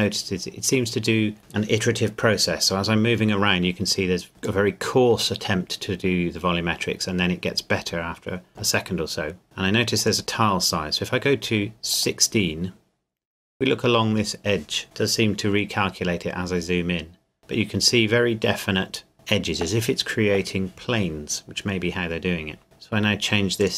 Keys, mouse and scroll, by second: 2.9 middle click, 4.6 middle click, 10.0 click, 13.9-14.8 scroll up 1, 14.8 shift+middle click, 15.0-15.6 scroll up 1, 16.0-16.5 scroll down 1, 16.9-18.2 scroll down 1, 23.6 click.